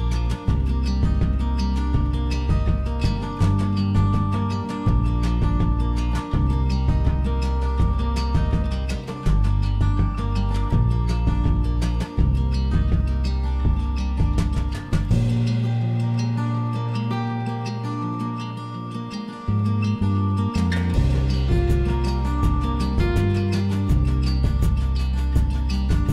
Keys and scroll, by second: 4.7 ctrl+a, 5.7 ctrl+h, 11.6 ctrl+c, 11.9 Escape, 12.1 Escape, 12.2 Escape, 13.9 ctrl+h, 14.4 ctrl+h, 15.3 ctrl+g, 15.7 ctrl+g, 16.5 ctrl+g, 18.3 ctrl+g, 18.9 ctrl+g, 19.2 ctrl+g, 20.7 m, 23.5 Escape, 24.9 l.